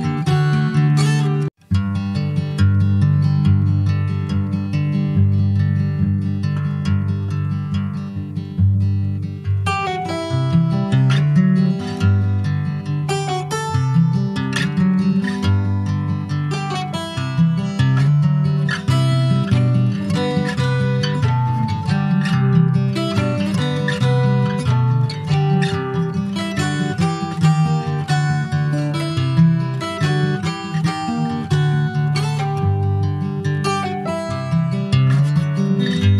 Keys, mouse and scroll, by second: 0.2 shift+click, 0.9 ctrl+b, 3.0-4.0 middle drag, 4.0 Tab, 4.2 click, 4.6 shift+middle click, 5.4 ctrl+s, 5.5 click, 5.9-7.9 shift+middle drag, 7.9 Tab, 8.1 click, 8.5 scroll up 2, 8.8 middle click, 9.3 3, 9.5 click, 10.7 shift+d, 11.4-13.0 middle drag, 13.0 ctrl+z, 13.5 click, 16.2 middle click, 16.5 click, 17.0 l, 17.3-17.7 scroll down 2, 18.3 click, 19.7 click, 20.0 middle click, 20.6 Tab, 21.0 middle click, 21.1 scroll up 2, 21.4 shift+middle click, 21.8 click, 22.1 click, 22.6 Tab, 22.8 click, 23.5 middle click, 23.8-24.4 scroll up 1, 24.6-27.0 middle drag, 27.0 click, 28.0 Tab, 28.5 Tab, 28.9 click, 29.9 3, 30.1 click, 31.1 2, 31.4 click, 32.2 click, 34.7 click.